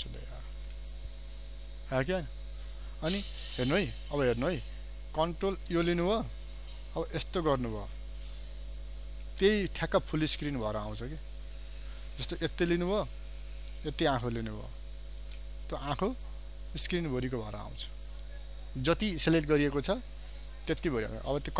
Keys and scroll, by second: 5.8 ctrl+space, 12.2 ctrl+space, 20.9 ctrl+0.